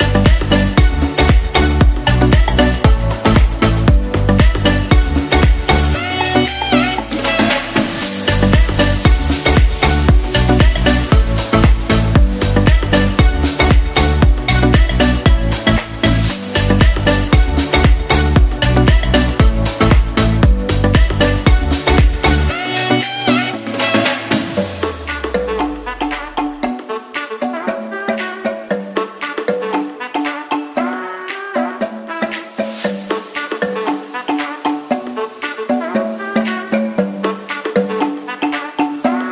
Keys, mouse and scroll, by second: 5.1 ctrl+b, 16.8 s, 17.5 g, 18.0 y, 20.9-22.6 right drag.